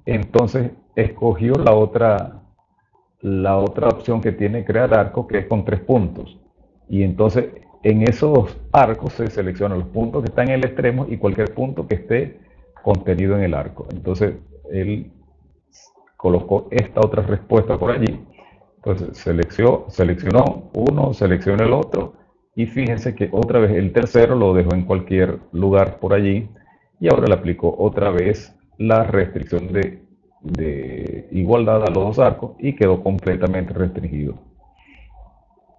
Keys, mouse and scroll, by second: 17.3 click, 19.3 click, 21.3 click, 22.8 click, 24.6 click, 25.8 click, 26.4 e, 27.3 click.